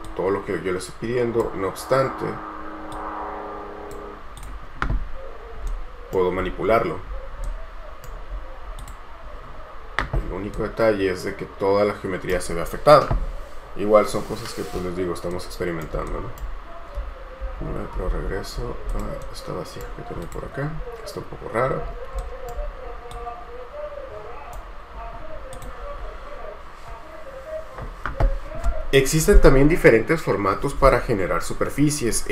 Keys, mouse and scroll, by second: 5.2-5.8 scroll down 1, 6.2 right click, 6.6-7.5 scroll up 1, 7.7 right click, 8.5-8.9 scroll up 1, 10.7 right click, 12.8-15.5 scroll down 1, 15.5 right click, 17.6 ctrl+z, 18.3 ctrl+z, 19.4 right click, 20.9-22.2 scroll down 1, 22.4 shift+right click, 26.2-29.1 scroll up 1.